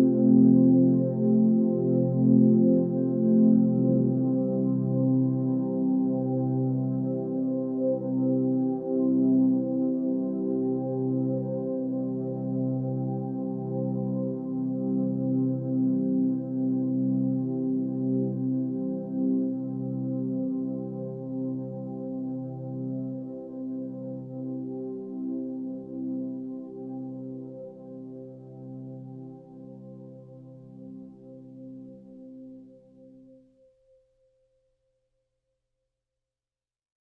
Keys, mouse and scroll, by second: 1.6 ctrl+space, 3.1 ctrl+t, 14.4 ctrl+space.